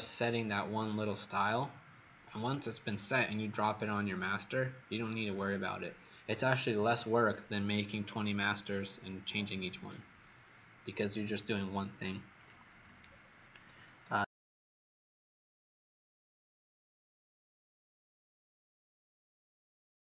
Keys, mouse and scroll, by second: 12.3 click, 13.0-13.5 alt+scroll down 3.